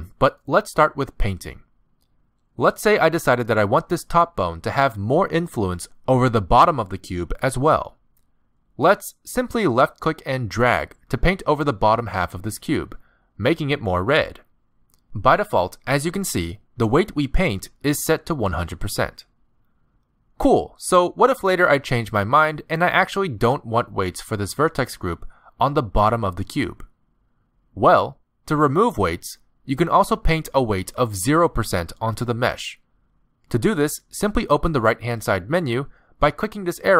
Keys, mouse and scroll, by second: 4.3 middle click, 7.4 middle click, 10.1 middle click, 11.0 click, 13.6 middle click, 14.4 click, 15.1 middle click, 15.4 click, 16.2 middle click, 16.4 click, 16.7 middle click, 16.9 click, 17.3 middle click, 17.5 click, 17.8 middle click, 18.0 click, 18.5 middle click, 18.6 click, 19.0 middle click, 19.2 click, 19.4 middle click, 19.6 click, 19.7 middle click, 20.9 middle click, 22.1 r, 23.5 middle click, 24.6 middle click, 27.2 middle click, 36.3 click.